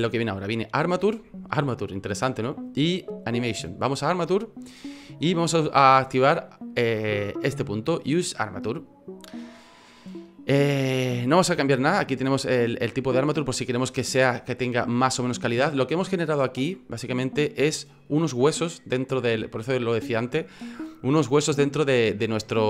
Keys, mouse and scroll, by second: 16.8-17.2 scroll up 4, 22.1-22.6 scroll down 2.